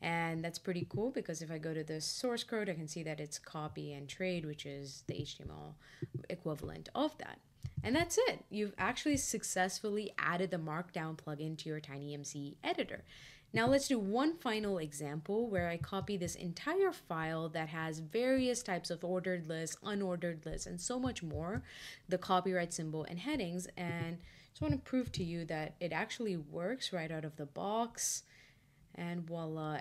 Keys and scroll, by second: 21.3 super+c, 25.0 shift+super+v.